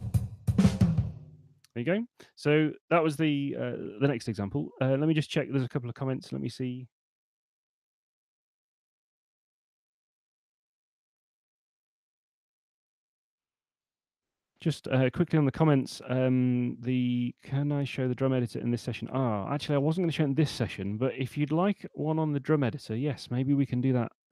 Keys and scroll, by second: 1.2 space.